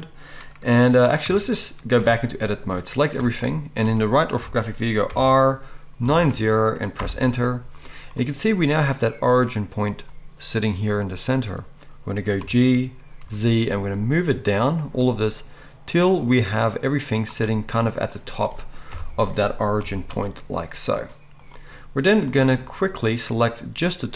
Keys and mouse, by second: 1.2 Tab, 2.0 a, 4.3 KP_3, 5.1 r, 12.4 g, 12.8-15.3 drag, 12.8-15.3 middle drag, 12.8-15.3 right drag, 15.4-17.1 drag, 15.4-17.3 middle drag, 15.4-17.1 right drag, 17.3 right click, 17.4-19.8 middle drag, 18.9 KP_1, 19.8-22.7 right drag, 19.8 g, 22.7-24.1 drag.